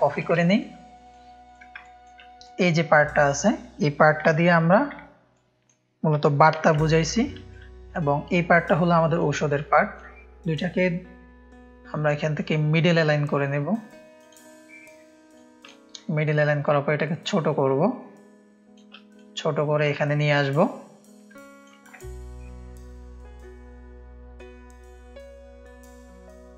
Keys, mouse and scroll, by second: 0.0 click, 0.0 space, 0.4 ctrl+click, 1.1 click, 1.5 click, 1.9 click, 1.9 space, 2.5-3.3 drag, 4.4 ctrl+g, 5.4 click, 6.7 ctrl+g, 6.8 ctrl+click, 7.6-8.0 drag, 8.8-9.2 drag, 9.4 click, 9.8 click, 12.4 click, 14.3-15.7 drag, 16.7-18.8 alt+shift+drag, 19.2-20.3 drag, 20.5 click, 21.4 space, 21.5 click, 22.0 ctrl+space, 22.0 ctrl+click, 22.9 click, 23.7-24.3 drag, 24.8-26.5 drag.